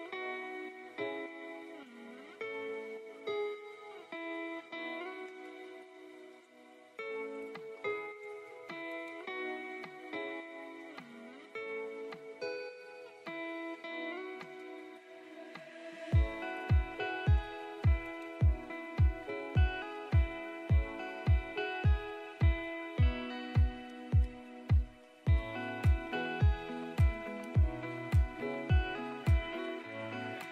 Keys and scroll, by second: 7.3 space, 7.8 F3, 11.1 Escape, 12.7 shift+F2, 13.1 F3, 13.5 Escape, 20.0 5, 20.3 Return, 25.6 space, 25.8 Escape, 28.0 ctrl+z.